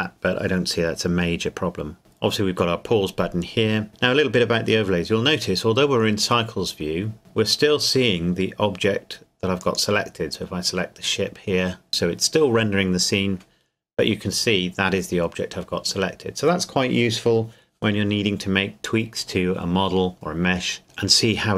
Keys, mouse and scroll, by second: 9.6 click.